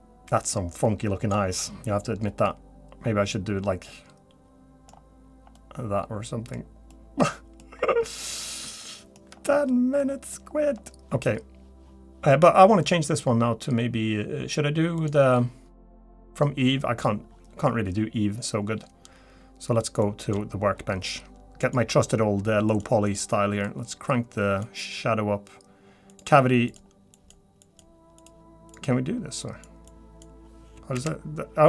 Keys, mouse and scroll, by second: 2.4 middle click, 4.9-5.4 scroll up 4, 5.5 middle click, 6.6-6.9 scroll down 2, 6.9 middle click, 7.8-8.1 scroll down 2, 8.2-8.6 scroll up 2, 8.8 shift+middle click, 9.3-9.6 scroll down 2, 10.0 middle click, 10.4 scroll up 3, 10.7 scroll down 2.